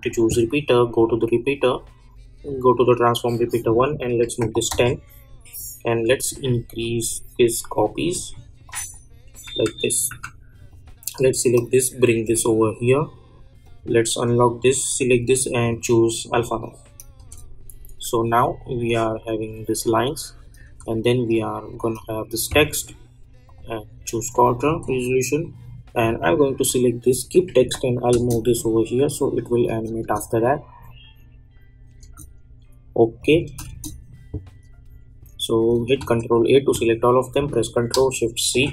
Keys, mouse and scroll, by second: 4.7 Return, 6.0-8.6 drag, 9.4 u, 10.1 u, 10.7-13.6 drag, 17.1 space, 20.6 space, 21.6 click, 23.9 space, 26.0 click, 27.6 [, 28.2 space, 33.2 click, 33.4 space, 35.9 ctrl+a, 38.4 ctrl+shift+c.